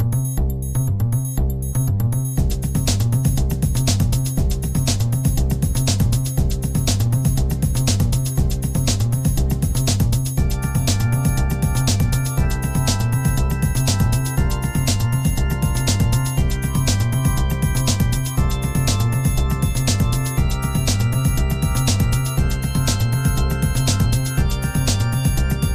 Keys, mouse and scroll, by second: 4.3-5.8 drag, 8.4 click, 11.0-13.4 drag, 15.1 click, 17.7-25.3 drag.